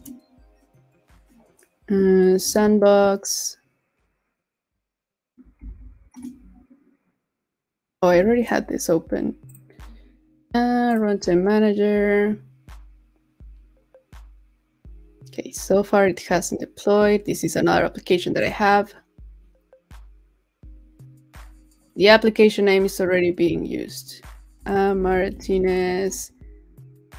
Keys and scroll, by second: 5.3 super+t, 8.2 super+w.